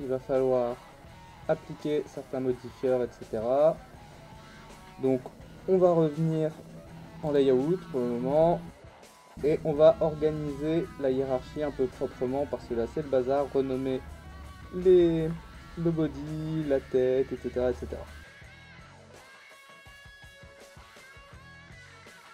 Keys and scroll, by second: 8.7 /.